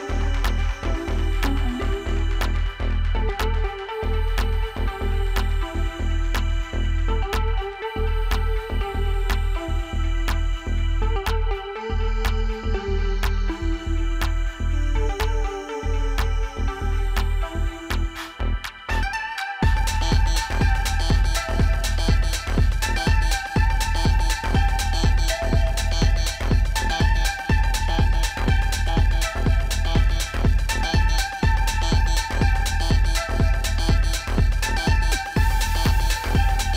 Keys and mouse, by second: 6.9 click, 14.9-16.6 typing, 17.9 click, 18.7 ctrl+-, 20.4-20.9 typing, 23.3 click, 24.7 z, 25.7 click, 32.2 click, 35.6 click.